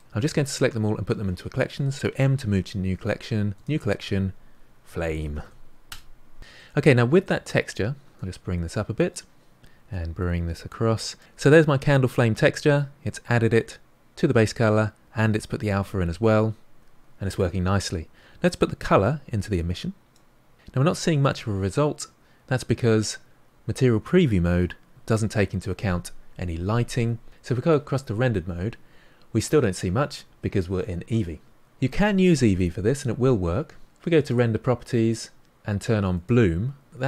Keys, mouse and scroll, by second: 0.4 click, 8.2-9.6 drag, 20.2-22.9 drag, 27.3 click, 36.1 click.